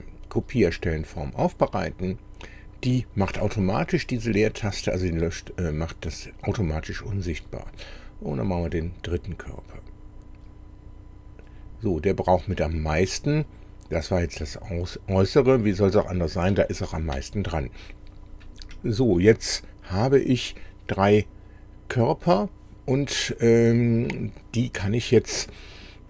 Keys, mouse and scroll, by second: 1.7 click, 7.3 click, 8.8 click, 15.8 middle click, 16.7 shift+middle click, 19.9 click.